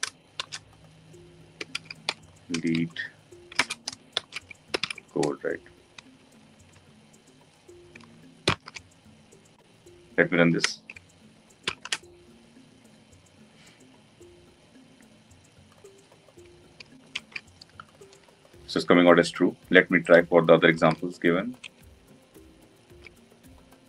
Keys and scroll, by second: 8.1 ctrl+alt+l, 11.6 ctrl+shift+F10, 20.7 ctrl+d.